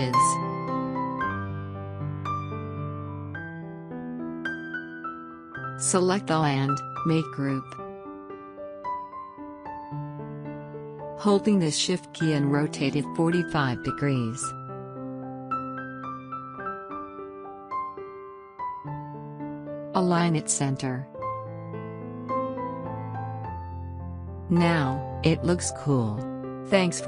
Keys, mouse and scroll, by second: 8.8 right click, 10.0 click, 15.5-18.6 shift+drag, 22.1 click.